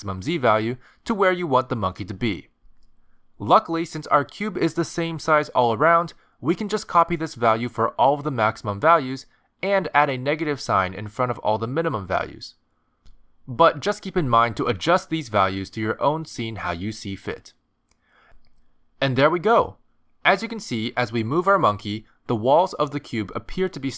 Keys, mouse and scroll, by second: 0.0 click, 0.2 click, 0.5 click, 0.8 click, 1.9 click, 2.1 click, 3.0 click, 5.3 middle click, 8.1 ctrl+c, 9.7 ctrl+v, 10.7 ctrl+v, 12.2 click, 14.8 ctrl+c, 15.5 ctrl+v, 16.4 ctrl+v, 17.2 middle click, 18.9-19.4 scroll down 2, 19.1 middle click, 19.7 g, 22.0 middle click, 22.7 g.